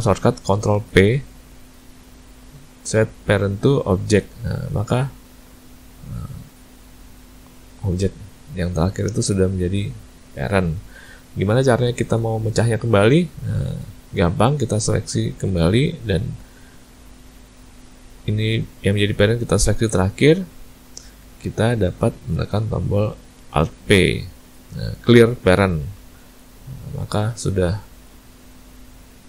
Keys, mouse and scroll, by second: 0.7 ctrl+p, 4.7 click, 5.6 click, 7.9 click, 9.4 click, 14.6 click, 15.7 shift+click, 16.2 click, 20.0 shift+click, 23.8 alt+p, 26.4 click, 27.2 click, 28.1 click, 29.0 click.